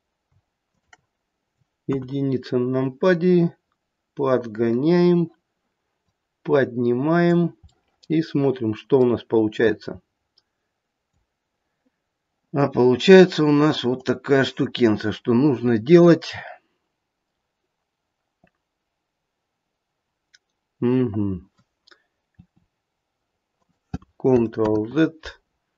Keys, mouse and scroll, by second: 0.7 shift+click, 1.8 KP_1, 2.7 click, 7.7 click, 7.7 middle click, 9.5 click, 14.0 click, 14.8-15.7 scroll up 1, 16.9-17.9 scroll up 1, 22.3 e, 24.6 ctrl+z.